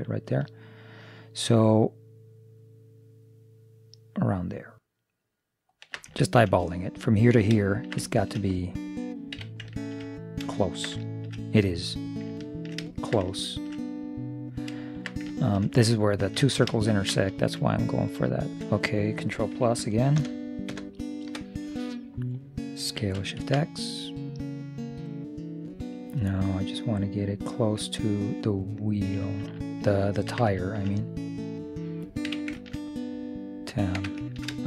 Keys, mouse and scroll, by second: 6.3-8.6 middle drag, 9.5 a, 10.7-19.3 middle drag, 18.4-20.1 right drag, 20.3 ctrl+KP_Add, 20.8 ctrl+KP_Add, 23.0 s, 30.7-34.6 middle drag, 32.3 z, 34.0 Tab.